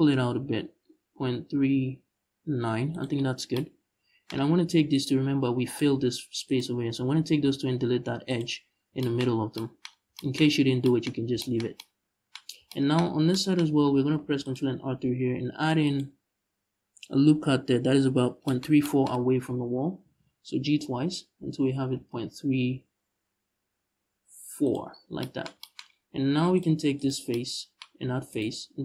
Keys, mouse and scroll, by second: 2.7 shift+click, 3.0 scroll down 1, 4.0-4.6 scroll up 1, 4.6 right click, 6.1-7.0 shift+right drag, 7.0 x, 8.4-8.7 scroll down 1, 9.0 scroll down 1, 9.6 scroll up 1, 12.2 scroll down 2, 13.8 ctrl+r, 15.6 click, 18.8-19.1 scroll up 1, 19.7 g, 24.4 shift+click, 24.5-24.9 scroll down 1, 26.2 click, 26.6 right click, 28.0 shift+right click, 28.3 x.